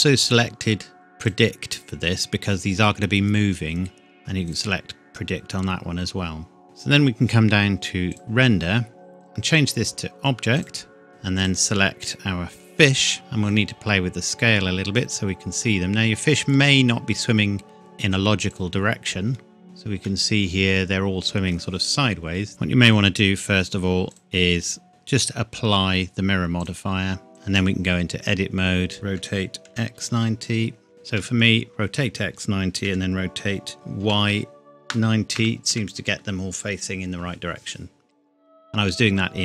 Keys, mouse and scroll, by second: 1.3 click, 4.2 click, 7.0-8.1 scroll down 1, 8.1 click, 8.6-9.2 scroll down 1, 9.2 click, 11.1-11.4 scroll down 1, 11.4 click, 13.5 click, 15.8-18.0 scroll up 1, 18.5 click, 20.1 middle click, 21.9-22.3 scroll down 1, 22.6 ctrl+z, 24.1 click, 26.6 click, 27.3 Tab, 27.5 a, 28.5-28.9 scroll up 1, 28.9 KP_Enter, 29.2 r, 29.7 x, 30.0 KP_9, 31.2 KP_Enter, 32.9 r, 34.0 y, 34.3 KP_9, 35.4 KP_Enter, 35.7 Tab, 37.3 scroll down 1.